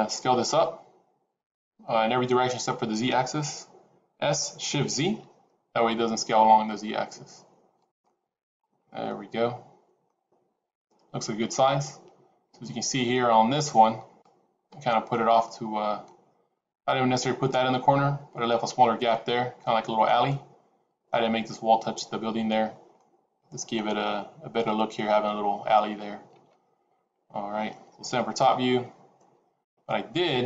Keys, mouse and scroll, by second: 4.1 s, 7.9 middle click, 8.6-9.0 scroll down 5, 9.0 middle click.